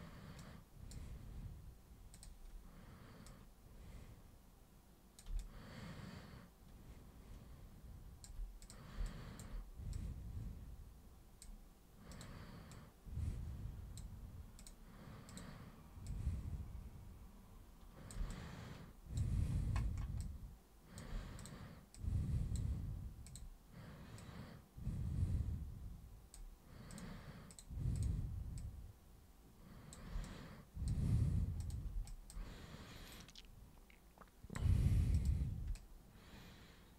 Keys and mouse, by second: 0.3 super+click, 2.1 super+click, 3.2-5.1 super+drag, 5.4-8.2 alt+super+drag, 8.6 super+click, 9.0 alt+super+click, 9.9-11.4 super+drag, 12.1 super+click, 12.7 super+click, 14.5 super+click, 15.2 super+click, 16.0 super+click, 18.2 alt+super+click, 20.2 alt+super+click, 21.4 super+click, 21.9 super+click, 23.2 super+click, 24.2-26.3 super+drag, 26.9 super+click, 27.5 super+click, 27.9 super+click, 28.5 super+click, 30.2-30.8 alt+super+drag, 31.5 super+click, 32.0 alt+super+click, 33.1 super+click, 35.1 super+click, 35.7-36.9 alt+super+drag.